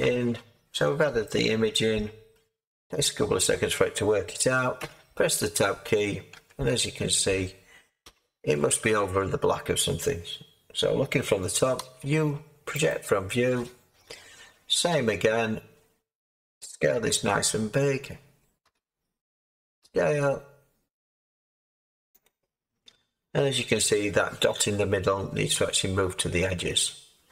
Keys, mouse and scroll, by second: 4.7 Tab, 6.3 a, 11.7 u, 16.9 s, 18.6 a, 19.8 s.